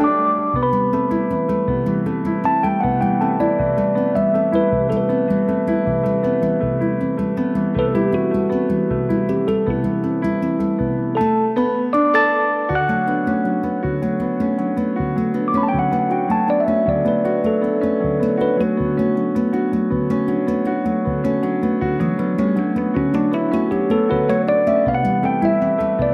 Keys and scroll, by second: 2.4 Right, 3.7 Return, 4.7 Escape, 14.1 space, 14.2 Escape, 19.3 space, 19.4 Escape, 23.9 l, 25.0 l, 26.0 5.